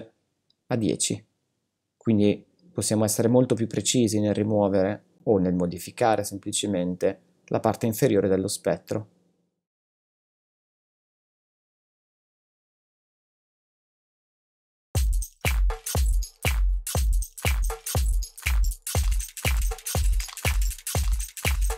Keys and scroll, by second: 12.4 space, 14.5 space.